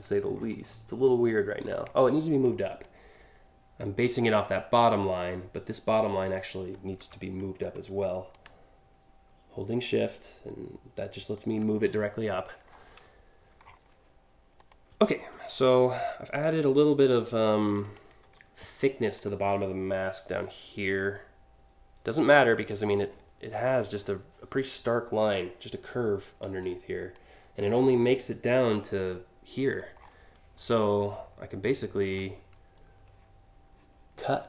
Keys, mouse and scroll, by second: 0.0-0.4 scroll up 2, 0.4 scroll down 1, 1.9 ctrl+click, 2.4-4.4 ctrl+drag, 5.5 ctrl+click, 6.6 a, 7.2 ctrl+click, 7.9-11.0 shift+drag, 11.5 scroll up 1, 12.3 scroll up 1, 13.2 scroll down 1, 14.2 click, 14.8-15.7 scroll down 4, 16.6 alt+scroll up 1, 17.4 click, 18.8 ctrl+click, 26.2-26.7 drag, 29.6 scroll down 1, 30.4 alt+scroll down 1, 30.9 alt+scroll down 1, 34.4 scroll up 1.